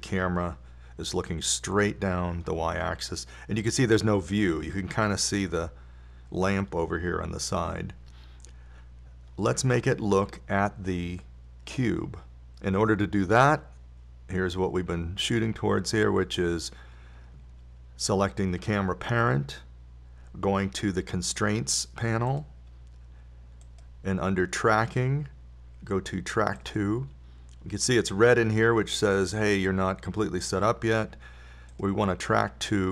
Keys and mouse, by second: 17.8-19.7 drag, 23.7-27.1 drag.